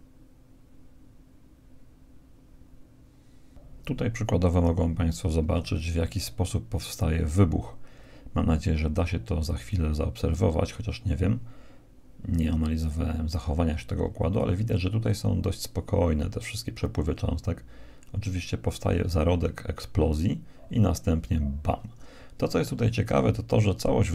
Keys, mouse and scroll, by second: 2.1 Escape, 2.1 alt+a, 5.6 alt+a.